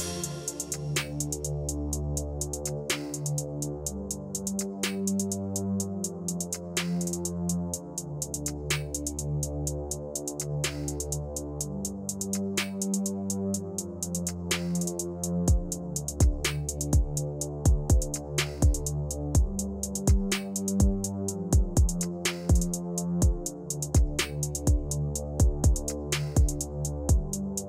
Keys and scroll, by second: 13.8 ctrl+c, 18.3 ctrl+v.